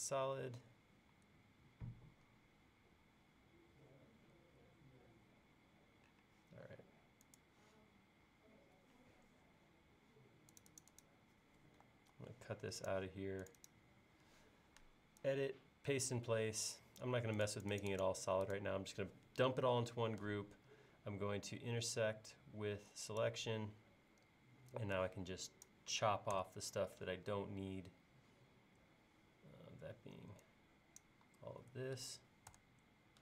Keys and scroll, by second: 12.2 super+x, 26.4 BackSpace, 32.5 BackSpace.